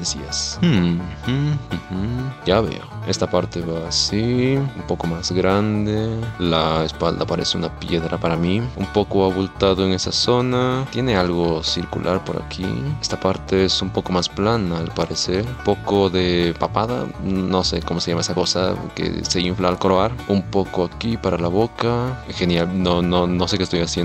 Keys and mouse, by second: 0.1 middle click, 1.0 shift+middle click, 1.8 shift+middle click, 3.0 click, 3.1 shift+click, 3.8 middle click, 4.1 shift+click, 4.6 middle click, 4.7 KP_1, 4.9 middle click, 6.6 shift+middle click, 7.4 middle click, 8.7-10.0 drag, 9.8 shift+middle click, 10.4 click, 10.6 click, 10.8 click, 10.9 ctrl+z, 11.8 click, 12.8 middle click, 14.9 click, 15.2 click, 15.6 middle click, 15.9 f, 16.1 click, 16.8 shift+click, 18.3 middle click, 18.6 shift+click, 19.5 shift+click, 19.8 middle click, 20.0 middle click, 21.2 shift+click, 22.2 middle click, 23.0-24.0 middle drag.